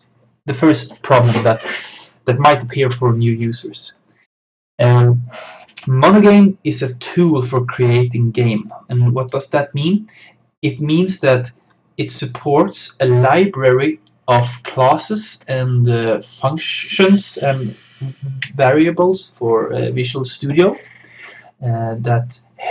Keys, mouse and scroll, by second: 8.6-11.9 drag, 13.3-16.6 drag.